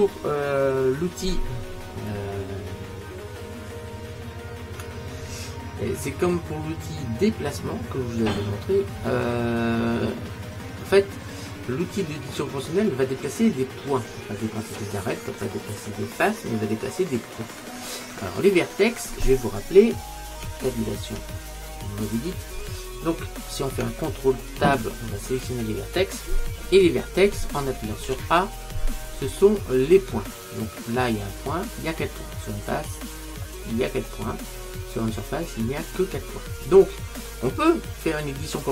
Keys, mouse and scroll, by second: 0.9-5.0 scroll up 1, 8.9-9.8 scroll up 1, 9.8-11.8 scroll down 1, 11.8 scroll down 1, 13.0-13.9 scroll up 1, 13.9 scroll up 1, 14.0-14.3 scroll down 1, 14.3-20.5 middle drag, 20.5 Tab, 21.2 Tab, 24.6 ctrl+Tab, 26.7-31.3 middle drag, 28.2 a, 32.2-35.6 middle drag, 38.5-38.7 middle drag.